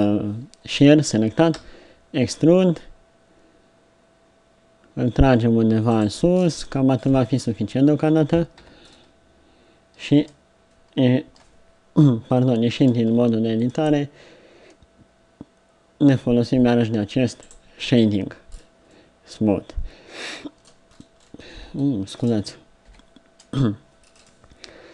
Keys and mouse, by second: 1.5 e, 6.4-8.6 drag, 8.6 z, 8.9-11.8 drag, 10.1 Tab, 17.4 click, 20.9 middle click, 22.9-24.9 middle drag, 22.9 KP_3.